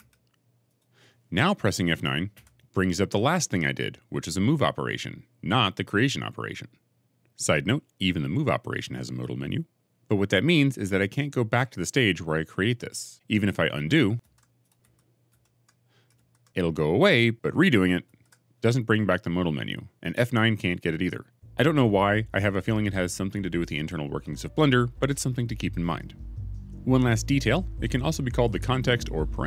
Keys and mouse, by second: 0.5 click, 2.2 F9, 14.7 ctrl+z, 15.2 ctrl+z, 16.0 ctrl+z, 17.9 ctrl+shift+z, 19.9 F9.